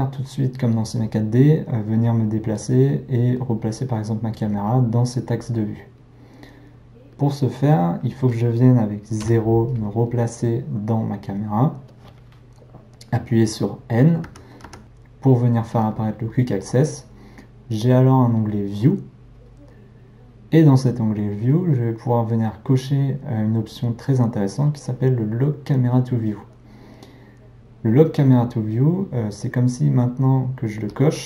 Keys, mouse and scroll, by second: 9.2 KP_0, 14.3 n, 14.7 n, 30.9-31.2 drag.